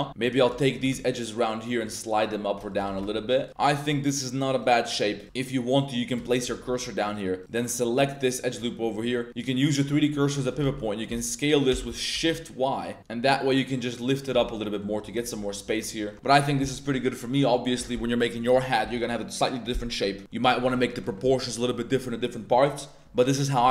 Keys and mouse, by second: 0.0 Tab, 0.3 ctrl+2, 0.3 ctrl+click, 0.7 g, 0.9 g, 2.7 shift+click, 2.8 g, 2.9 g, 3.4 shift+click, 3.7 1, 4.5 click, 5.2 shift+s, 6.1 click, 6.4 1, 7.0 right click, 7.4 right click, 7.7 right click, 8.9 middle click, 9.3 click, 10.1 middle click, 10.4 shift+drag, 10.6 z, 10.7 middle click, 11.1 s, 11.7 shift+x, 12.1 shift+y, 14.3 z, 14.4-14.8 middle drag, 15.1 Tab, 15.3 Tab, 15.4 middle click, 15.6 Tab, 16.0 Tab, 16.1 middle drag, 16.5 middle click, 17.1 middle drag, 20.2 middle click, 20.7 middle click, 22.6-23.0 middle drag.